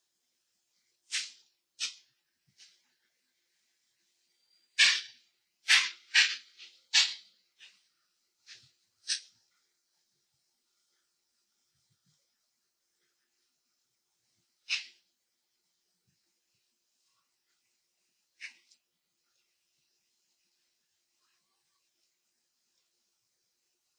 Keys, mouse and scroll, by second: 0.8 ctrl+click, 2.1-4.7 drag, 4.7 space, 4.9-6.9 ctrl+drag, 6.9-9.4 drag, 9.9 space, 10.1 click, 10.5 ctrl+click, 11.2 click, 11.5 ctrl+click, 12.7 click, 17.7 ctrl+space, 19.9 alt+click, 20.3 space, 21.3 ctrl+click, 22.1 space, 22.3 ctrl+click.